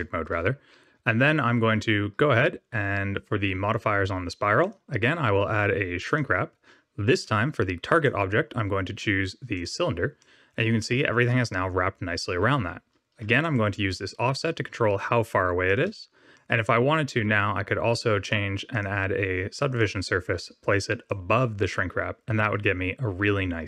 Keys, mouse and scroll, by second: 0.2 w, 4.6 click, 7.9 click, 10.1 middle click, 10.9 scroll up 2, 13.3 shift+click, 16.3 middle click, 18.2 click, 18.6 click, 21.0 click.